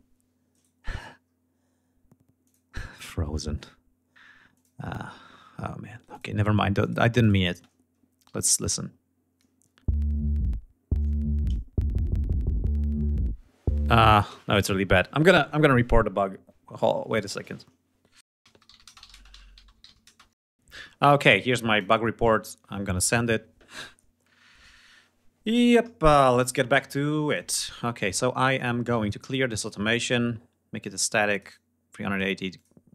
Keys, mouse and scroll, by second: 0.4 right click, 1.1 scroll up 2, 1.6 scroll down 2, 2.2 click, 2.8 scroll up 2, 3.6 scroll up 2, 4.3 click, 4.6-5.2 scroll down 4, 5.9 click, 6.6 click, 7.0 click, 7.3 space, 7.8 ctrl+scroll up 2, 8.6 ctrl+scroll down 2, 14.3 space, 21.7 click, 22.2 click, 25.4 click, 27.2 click, 28.5 right click, 29.6 click, 30.8-32.3 drag, 32.5 click.